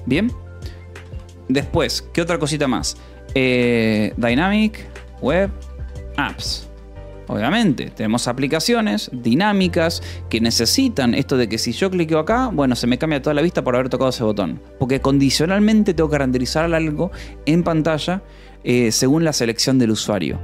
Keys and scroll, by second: 0.0-1.0 typing, 3.5-9.9 typing, 7.8 Escape.